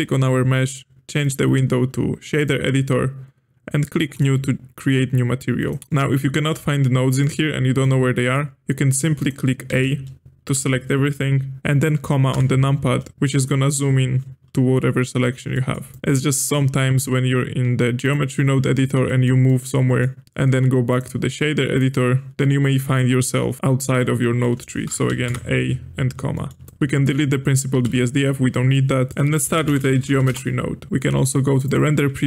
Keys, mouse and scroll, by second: 1.2-5.8 drag, 5.8-7.2 middle drag, 7.2-7.8 scroll down 7, 7.8-9.1 middle drag, 9.1 click, 9.7 a, 12.3 KP_Decimal, 15.5 middle click, 15.9 click, 16.9-18.4 drag, 18.4-18.9 scroll down 9, 19.0-20.2 middle drag, 20.2-22.3 drag, 22.3-22.7 scroll down 4, 22.7 middle click, 23.4 scroll down 4, 23.9-25.0 middle drag, 25.0 a, 25.2 KP_Decimal, 26.3-26.6 middle drag, 26.6-27.8 drag, 27.8 x, 28.5 middle click, 29.1 click, 29.4 space, 31.7 click.